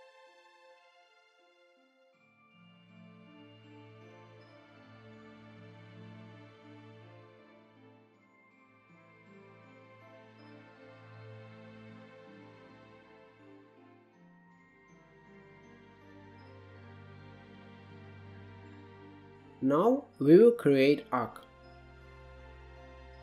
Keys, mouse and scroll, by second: 0.2 click, 0.7 scroll up 1, 1.0 click, 2.3 click, 3.7 middle click, 3.9-7.9 drag, 7.9 click, 9.3-10.5 drag, 10.6-11.5 scroll up 5, 10.8 shift+middle drag, 11.5-13.4 drag, 13.4 scroll up 2, 13.6-14.4 scroll down 16, 14.4 shift+middle click, 14.9 scroll up 1, 15.1 click, 15.9 scroll up 1, 16.1 shift+middle click, 17.0 click, 17.4-17.9 scroll down 1, 17.9 middle drag, 18.1 scroll down 2, 18.4 scroll up 1, 18.5 shift+middle click, 19.0 scroll down 1, 19.1 shift+middle drag, 19.4 drag, 20.6 KP_Divide, 21.1 KP_1, 21.6 KP_3, 22.6-23.2 drag.